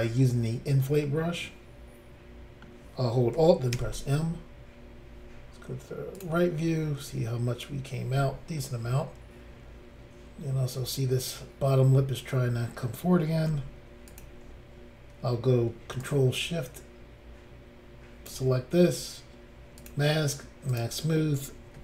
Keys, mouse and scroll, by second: 1.1 middle click, 2.8 scroll up 1, 3.8 alt+m, 6.1 click, 6.2 click, 13.4 f, 14.0 click, 14.2 click, 16.0 ctrl+click, 19.8 click, 19.9 click, 20.7 click, 20.8 click.